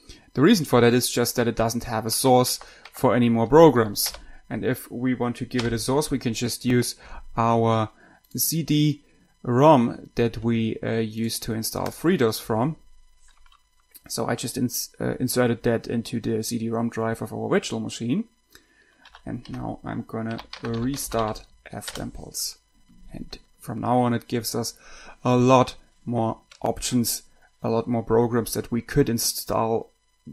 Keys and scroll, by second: 2.1 Tab, 2.5 Tab, 2.5 Tab, 3.2 Tab, 4.5 Return, 19.1-22.0 typing, 22.1 Return.